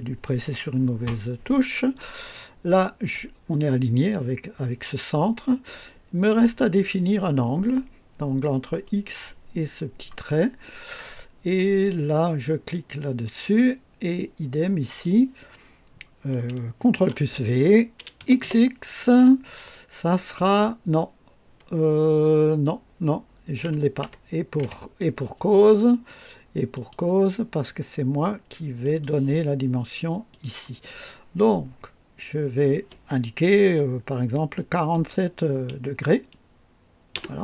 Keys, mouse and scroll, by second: 1.6 scroll up 2, 6.6 click, 8.8 click, 12.7 click, 14.8 click, 17.0 ctrl+v, 18.2 x, 23.6 Escape, 24.6 Escape, 26.7 click, 28.8 click, 30.3 click, 34.8 KP_4, 35.1 KP_7, 37.1 KP_Enter.